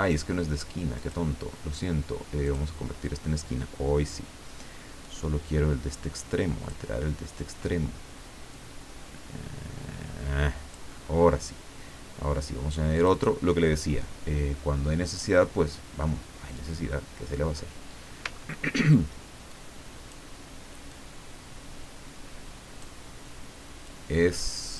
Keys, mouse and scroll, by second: 1.0 click, 2.4 click, 5.0-6.9 drag, 8.5-11.0 drag, 12.9 click, 15.1 click, 18.3 ctrl+scroll up 2, 19.5 click, 20.9-23.0 drag, 23.9-24.7 drag.